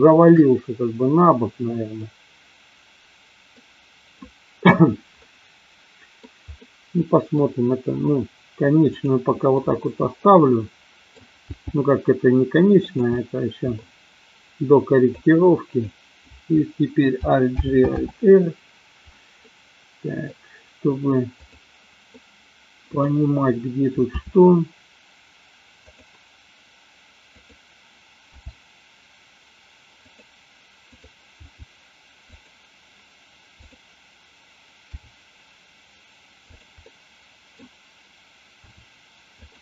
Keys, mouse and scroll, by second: 2.0-3.6 middle drag, 5.3-6.3 middle drag, 6.6-7.5 middle drag, 9.5-11.4 middle drag, 11.4 g, 12.9 click, 13.1-13.8 middle drag, 15.1-15.9 drag, 17.5 alt+g, 17.9 alt+r, 19.4-20.1 middle drag, 22.1-23.0 middle drag, 24.1 r, 25.9 click, 27.4 click, 28.4 g, 30.0 click, 30.9 click, 31.5 g, 32.4 click, 33.6 click, 34.9 g, 36.5 click, 36.9 middle click, 38.5 r, 39.4 click.